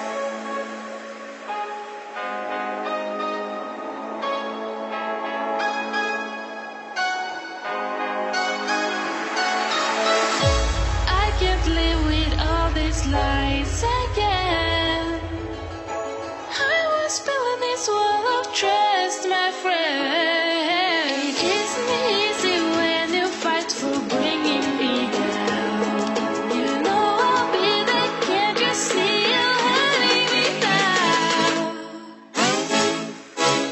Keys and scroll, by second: 1.9 Delete, 4.9 ctrl+c, 5.1 ctrl+v, 20.9 Right, 22.1 Up, 22.7 Right, 27.0 Up, 30.4 Down, 31.3 Up, 32.2 Right.